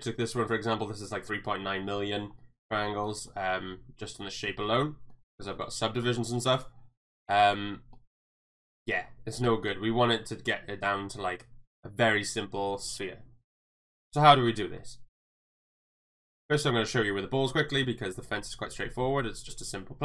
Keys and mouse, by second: 2.4-2.7 middle drag, 3.2 right drag, 3.5-5.1 middle drag, 6.0 middle click, 7.3 middle click, 7.9 middle click, 8.7 middle click, 9.4 KP_1, 13.4 click, 16.1 click.